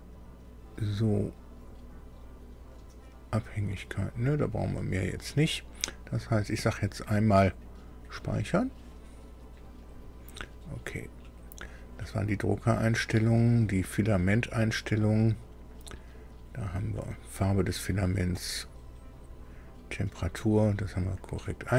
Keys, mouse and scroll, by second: 2.7 click, 4.6 click, 8.2 click, 9.8 click, 13.4 click.